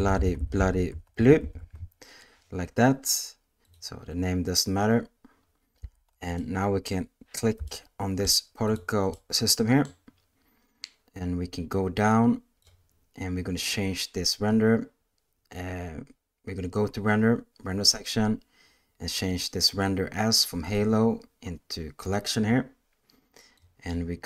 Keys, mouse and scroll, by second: 0.1 g, 0.9 s, 1.4 t, 6.0 alt+a, 6.1 alt+s, 6.4-6.8 middle drag, 7.7-8.7 shift+middle drag, 8.7 click, 9.1-9.8 middle drag, 11.8 click, 20.6-22.1 drag, 23.6 click.